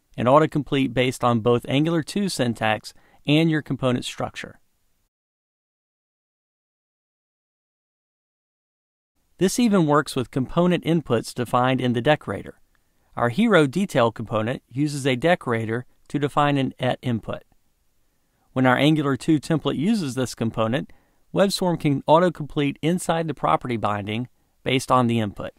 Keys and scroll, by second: 1.7 Return, 4.0 Return, 6.9 Return, 20.5 Tab.